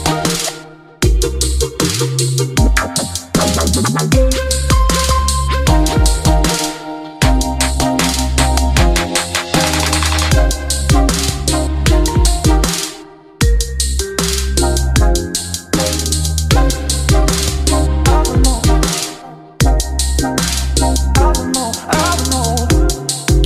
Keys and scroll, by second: 7.8 ctrl+c, 8.7 ctrl+v, 12.7 Caps_Lock, 12.9-15.7 typing, 17.3 ctrl+a.